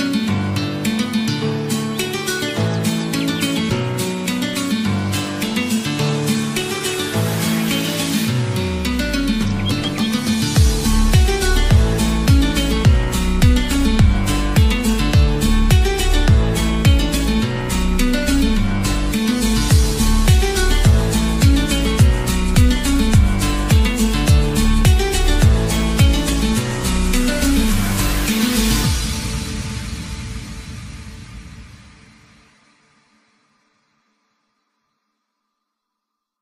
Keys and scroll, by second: 21.3 Return, 30.9 Return, 32.6 ctrl+alt+shift+e, 36.2-36.4 typing.